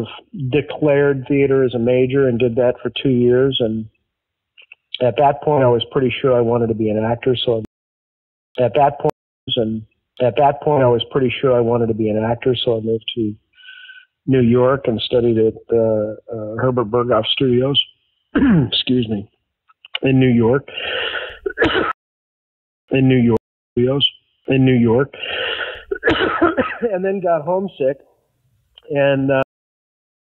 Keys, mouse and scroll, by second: 5.7-7.6 drag, 7.6 space, 8.2 ctrl+shift+Delete, 8.5 space, 9.0 space, 9.3 click, 9.3 space, 11.0 ctrl+s, 15.5-17.5 drag, 18.0 click, 19.6-21.8 drag, 21.8 space, 22.5 ctrl+shift+Delete, 22.8 space, 23.3 space, 23.6 click, 23.7 space, 26.7-29.4 drag, 29.4 space, 30.1 ctrl+shift+Delete.